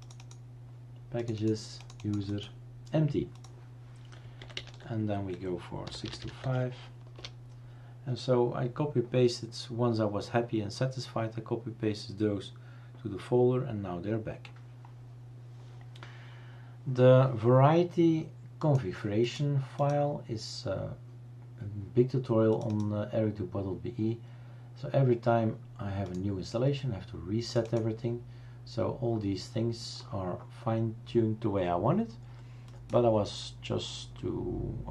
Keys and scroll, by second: 4.5 typing, 5.7-6.7 typing, 7.1 Return.